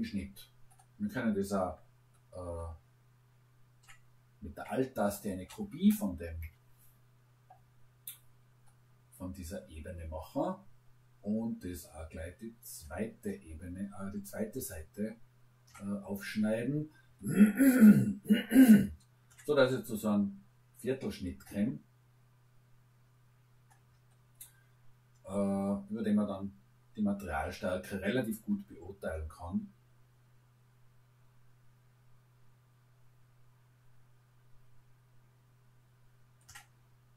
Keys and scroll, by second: 6.4 Return.